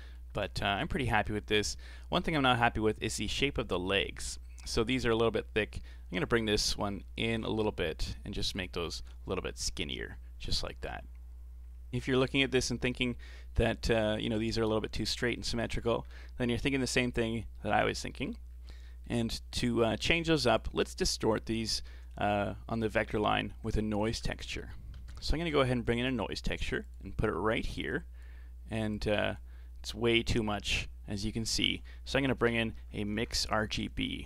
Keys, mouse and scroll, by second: 0.5-0.8 scroll up 5, 0.8-1.9 middle drag, 1.9 scroll down 5, 2.2-5.2 middle drag, 6.2-9.0 drag, 9.0-9.6 scroll up 3, 9.6-10.0 scroll up 1, 11.6 scroll down 3, 11.9 scroll up 1, 12.1 middle click, 12.5 a, 12.7 a, 13.0-15.5 scroll down 4, 15.5-16.9 scroll down 8, 16.9-18.3 middle drag, 18.5-18.8 scroll up 3, 18.8 middle click, 19.3 scroll up 1, 19.3-20.1 middle drag, 20.1 click, 20.9-23.9 middle drag, 24.0 shift+a, 28.9-31.5 drag, 31.5 shift+a.